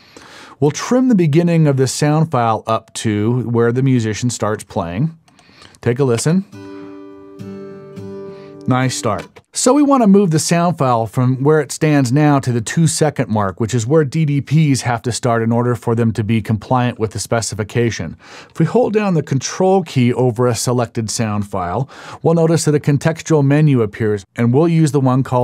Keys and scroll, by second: 6.2 space, 9.2 space.